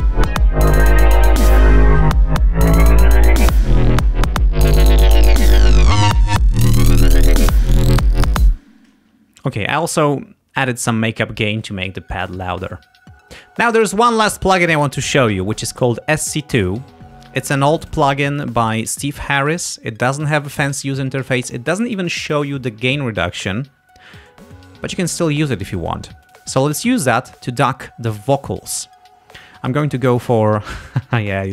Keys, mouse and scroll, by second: 10.5 space, 27.3-27.6 scroll down 2, 30.5 click, 31.4 scroll down 1.